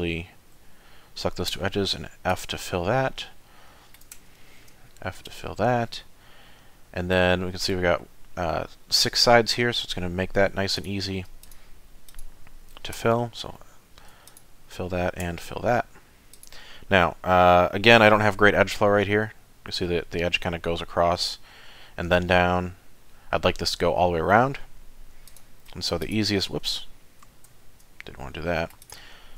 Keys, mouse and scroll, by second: 1.6 f, 2.3 click, 2.8 middle click, 3.3 shift+middle click, 4.2 f, 4.9 shift+middle click, 5.4 middle click, 10.8 click, 11.4 shift+click, 12.1 shift+click, 13.0 f, 14.3 alt+click, 15.2 f, 15.6-16.0 scroll down 3, 16.3 click, 17.0 middle click, 18.3 ctrl+r, 27.5 ctrl+z, 28.0 middle click, 28.8 click.